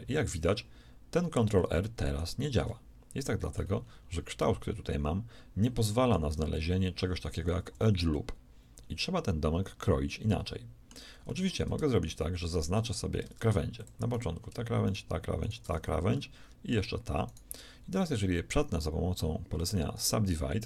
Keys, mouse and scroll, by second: 2.6-6.4 middle drag, 7.5 z, 8.0 middle click, 13.7 ctrl+Tab, 15.8 z, 19.4 w.